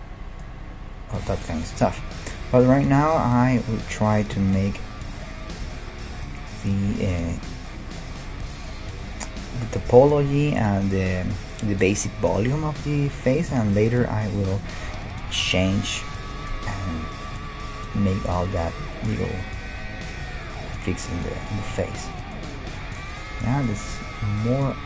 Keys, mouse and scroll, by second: 5.6 KP_1, 6.1 KP_5, 13.2-13.6 scroll up 1, 15.4 middle click, 15.9-17.7 middle drag, 17.0-20.6 right drag, 19.2-21.4 middle drag, 20.2 e, 20.8 s, 21.6-24.8 middle drag, 24.2 g.